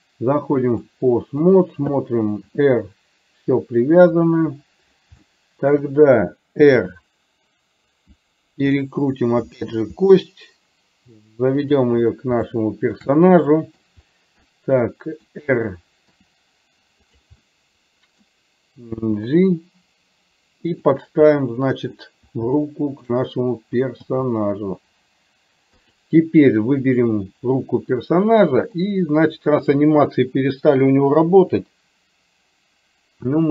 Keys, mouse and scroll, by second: 1.5 click, 2.5 r, 5.4 shift+middle click, 6.8 r, 9.6 g, 12.6 shift+middle click, 13.1-14.4 middle drag, 14.6-16.0 middle drag, 16.6 r, 17.5 middle click, 19.3 g, 21.5 middle click, 22.8 shift+middle click, 24.1 g, 26.9 click, 28.9-29.9 drag, 31.4 Delete.